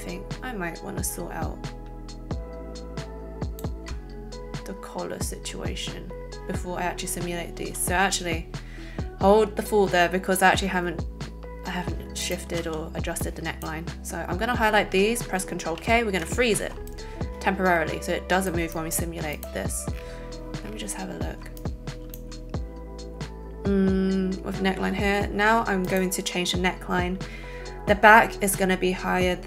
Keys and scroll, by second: 7.6 a, 12.6 a, 15.6 ctrl+k.